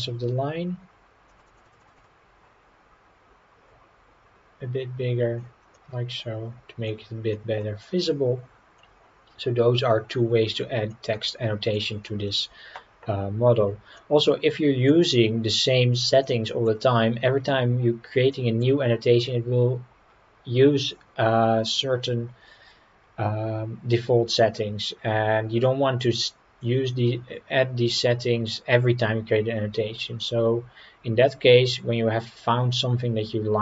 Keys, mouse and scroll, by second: 1.3-2.5 drag, 5.7-6.9 middle drag, 7.3 middle drag, 7.8-8.4 scroll down 5, 8.8-10.1 middle drag, 10.9-11.7 middle drag, 14.0-14.9 middle drag, 16.2-16.7 middle drag, 18.3-18.6 middle drag, 22.1-24.6 scroll down 4.